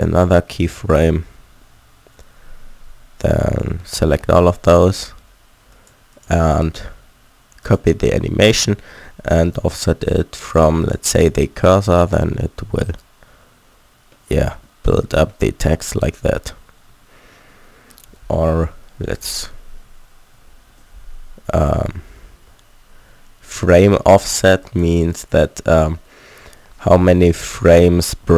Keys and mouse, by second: 3.9 a, 4.0 a, 11.6 alt+a, 12.6 a, 15.8 alt+a, 16.9 a, 18.6 ctrl+z, 20.3 ctrl+z, 24.6-28.3 drag.